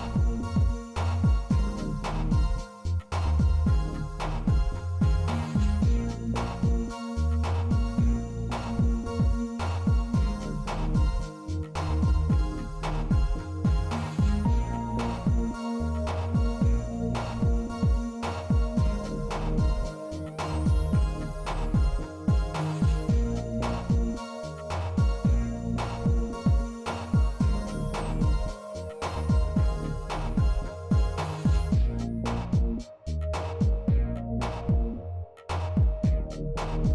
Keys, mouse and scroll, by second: 0.8-3.5 drag, 1.8 KP_0, 4.2 shift+middle click, 5.0 z, 7.5 shift+middle drag, 9.8 middle click, 10.9 shift+middle drag, 13.5 z, 15.3 middle click, 16.0 shift+d, 18.7 g, 21.0 r, 22.9 g, 24.8 middle click, 25.5 shift+b, 27.0 z, 29.6-30.0 shift+drag, 32.5 shift+b, 35.4 middle drag.